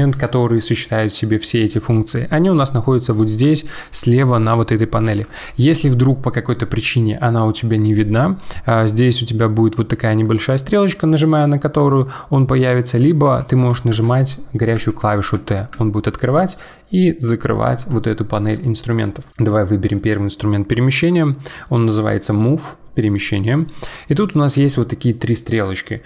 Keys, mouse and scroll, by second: 10.2-11.7 drag, 11.7 t, 13.2 t, 13.6 t, 13.9-15.7 t, 17.7 t, 21.0-24.0 drag.